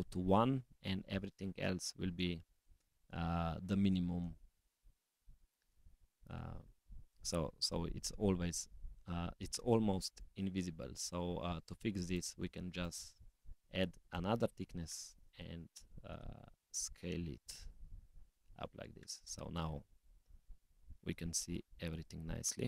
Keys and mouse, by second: 4.5 g, 10.1 click, 11.6-12.1 drag, 12.8-14.3 drag, 16.5-18.5 drag, 19.8 click, 21.7 s.